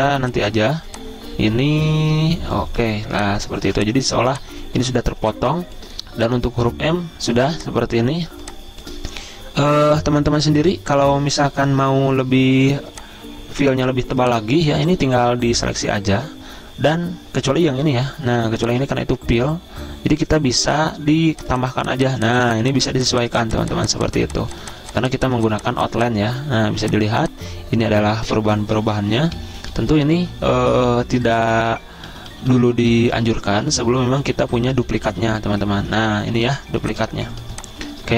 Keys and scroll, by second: 0.0-0.3 typing, 3.3 z, 4.3 typing, 27.3 z, 29.2 ctrl+z, 29.6 ctrl+z, 29.9 ctrl+z, 30.1 ctrl+z, 36.5 z, 37.7 space.